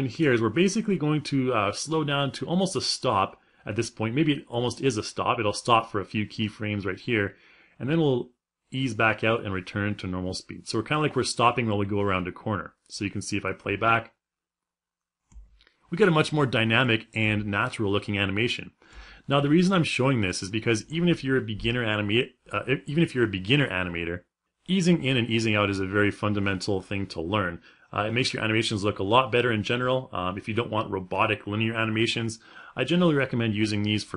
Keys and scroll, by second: 13.2 space.